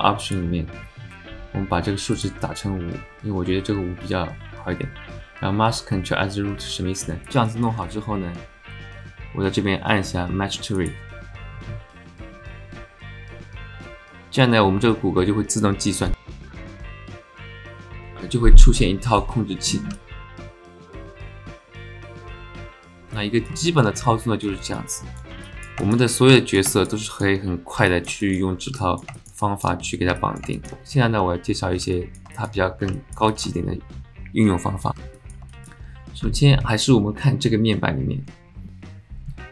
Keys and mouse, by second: 0.2-7.2 drag, 7.2 shift+middle click, 7.5 middle click, 10.7-16.4 drag, 19.9 alt+drag, 20.4 alt+shift+drag, 20.6 click, 21.0 alt+shift+click, 23.1 alt+drag, 23.3 alt+middle click, 23.6 shift+middle click, 24.0-24.4 alt+middle drag, 24.6 shift+middle drag, 24.9 middle drag, 25.4 middle drag, 25.8 shift+middle click, 26.3 alt+middle drag, 26.7 shift+click, 27.1 alt+shift+click, 27.9 alt+drag, 28.2 shift+click, 28.8 click, 28.9 alt+middle click, 29.2 alt+shift+middle click, 29.4 alt+middle click, 30.2 alt+middle click, 30.5 shift+middle click, 31.9 click, 32.3 alt+shift+click, 32.9 alt+click, 33.3 alt+shift+click, 35.1 alt+click, 35.5 alt+shift+drag.